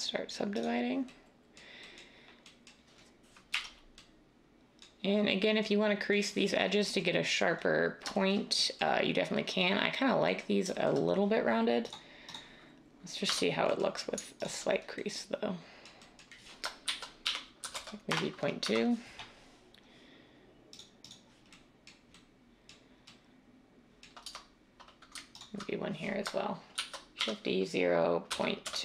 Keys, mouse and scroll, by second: 3.5 \, 13.2 Tab, 16.8-17.7 typing, 18.1 Return, 18.6 Tab, 24.2 Tab, 26.7-28.7 typing.